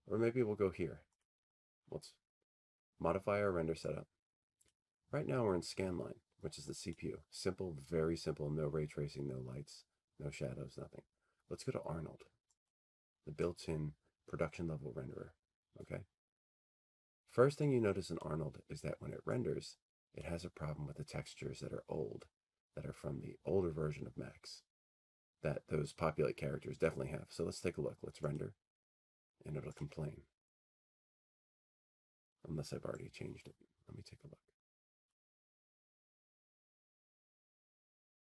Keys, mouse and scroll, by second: 1.4-3.3 drag, 4.8-9.0 drag, 12.8-14.9 drag, 28.4 click, 30.0 click, 35.1 click.